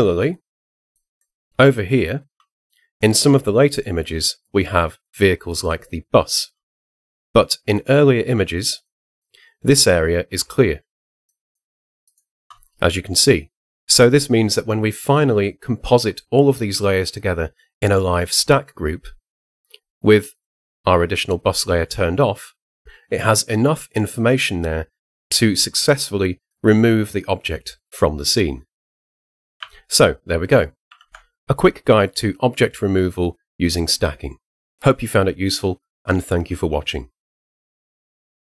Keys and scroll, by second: 30.9 super+0.